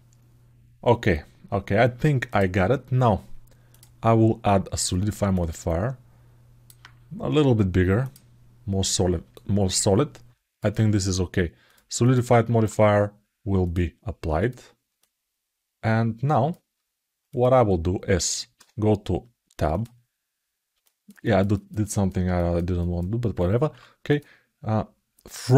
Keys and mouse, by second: 3.5-4.6 drag, 5.1-6.4 alt+middle drag, 9.1-10.3 alt+middle drag, 11.4 click, 13.5 click, 14.7-16.3 alt+middle drag, 17.1 click, 20.6 alt+middle click, 21.0 ctrl+alt+middle click, 21.6 ctrl+alt+middle click, 22.1 alt+shift+middle click, 23.9 click, 25.5 KP_1.